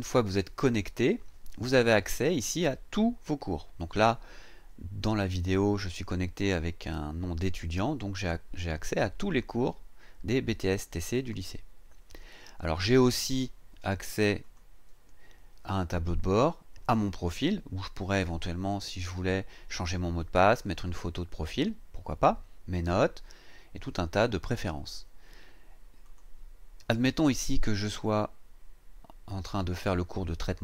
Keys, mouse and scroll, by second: 14.4 click, 26.0 click.